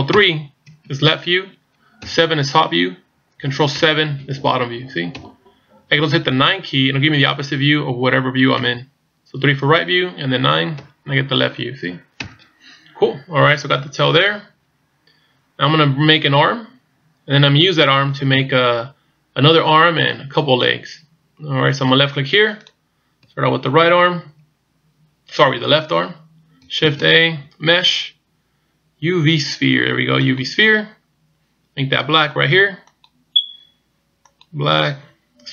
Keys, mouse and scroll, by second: 0.2 ctrl+KP_3, 3.4 KP_7, 5.2 KP_1, 7.0 KP_9, 8.6 KP_3, 10.8 KP_9, 12.3 KP_1, 13.7-14.3 shift+scroll up 6, 22.6 click, 26.8 shift+a, 32.9 click.